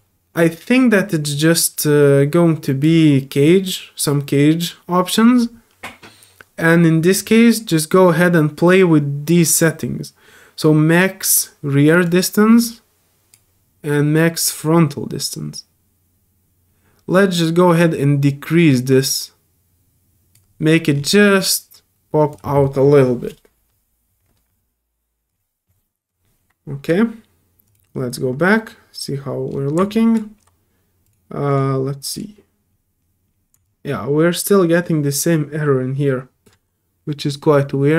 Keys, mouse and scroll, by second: 10.6 middle click, 10.6 scroll up 1, 12.0 click, 14.4-20.3 drag, 20.9 middle drag, 20.9 scroll up 1, 22.3 click, 27.6 click, 29.9 alt+click, 31.0 alt+click, 31.5 alt+click, 32.1 alt+click, 32.7 alt+middle click, 32.7 alt+scroll up 2, 33.0 alt+middle click, 33.0 alt+scroll down 2, 33.2 middle click, 33.6-36.4 alt+drag.